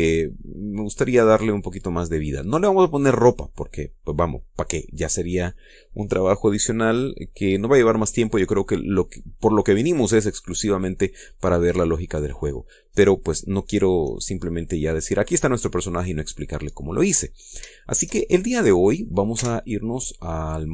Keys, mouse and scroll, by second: 2.8 scroll down 2, 3.3 scroll up 2, 13.5-15.9 middle drag, 16.3-17.8 drag, 17.9-18.2 scroll up 1, 18.2 shift+middle click, 19.0 click, 19.9 Tab.